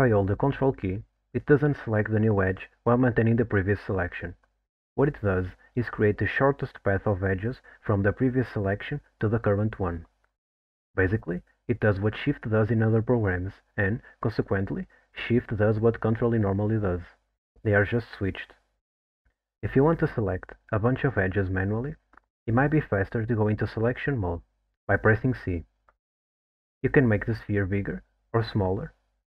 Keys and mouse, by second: 22.7 click, 23.4 c.